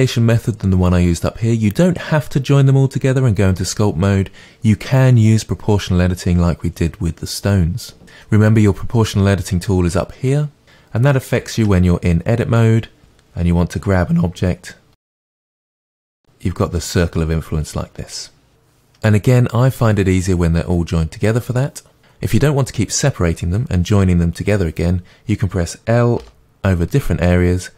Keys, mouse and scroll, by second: 11.6 Tab, 13.0 g, 15.4 click, 15.9 g, 22.0-24.3 scroll up 2, 24.3-26.2 scroll up 1, 26.2 l.